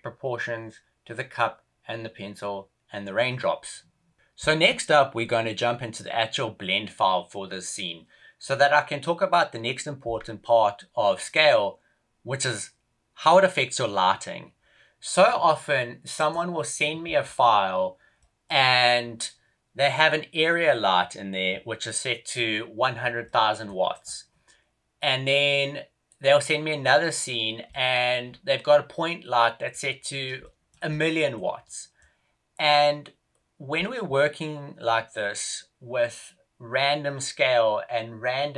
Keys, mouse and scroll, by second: 27.1-27.6 scroll down 1, 27.6 middle click, 28.1-29.2 scroll down 1, 29.2 middle click, 29.2-29.8 scroll down 4, 29.8-30.1 scroll down 2, 30.3 shift+middle click, 30.9 middle click, 31.5 middle click.